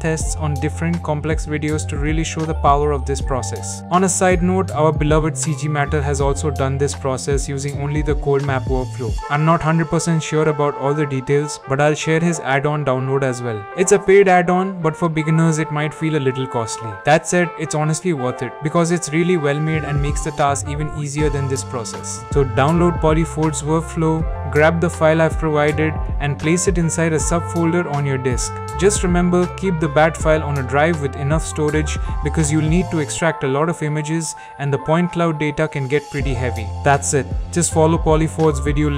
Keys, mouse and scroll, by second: 1.4 click, 1.6 middle click, 2.4 middle click, 2.8 alt+a, 4.1 click.